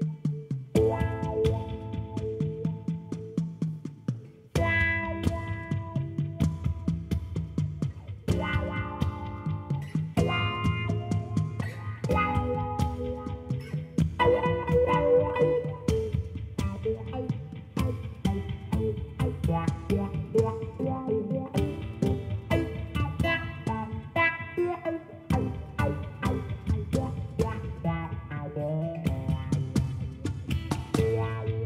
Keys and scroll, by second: 3.7 ctrl+b, 8.8 Tab, 19.7 ctrl+shift+Left, 20.0-21.3 typing, 26.1 Tab, 26.8 Tab, 28.0 shift+a, 28.9 Tab, 29.3 s, 30.4 Tab, 30.5 g, 30.7 z, 31.1 g, 31.4 x.